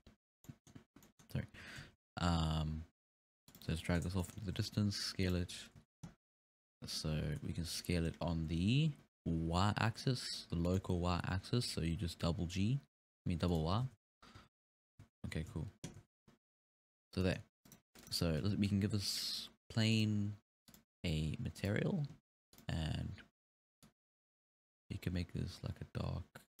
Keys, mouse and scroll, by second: 0.3 scroll up 2, 0.5-1.4 middle drag, 1.4 scroll down 1, 1.7 g, 3.7-4.2 scroll down 1, 4.2 middle click, 4.5 scroll up 1, 4.6 s, 5.8 z, 6.7-7.1 scroll up 1, 7.1 scroll down 3, 7.3 s, 10.9 g, 13.9 alt+a, 14.4 z, 15.0 z, 15.5 z, 16.0 z, 16.4-16.9 scroll up 3, 17.1 scroll down 2, 17.2-18.0 middle drag, 17.7 right click, 19.2 click, 20.0 click, 21.6-23.9 drag.